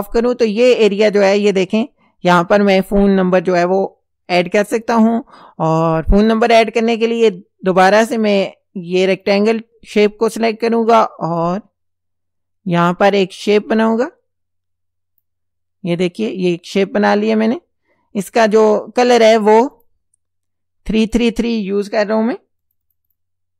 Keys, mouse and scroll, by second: 9.2 click, 11.4-15.4 drag, 19.8 click, 20.9 click, 22.6 click.